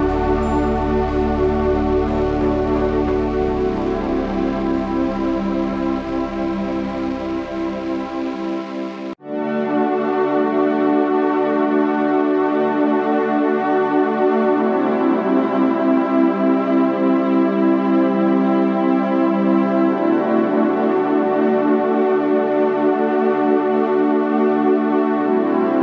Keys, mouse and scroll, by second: 3.5 Tab, 4.0 KP_1, 4.8 z, 9.6 KP_3, 9.9 z, 11.0 KP_3, 14.6 Tab, 15.3 c.